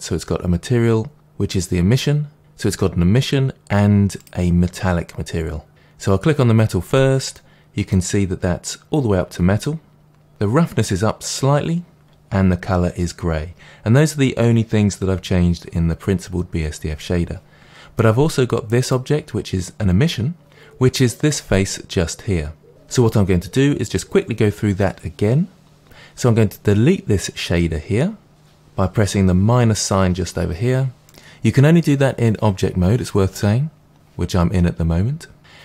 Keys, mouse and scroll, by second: 5.1 click, 7.3-18.8 middle drag, 18.8 click, 31.2 ctrl+z.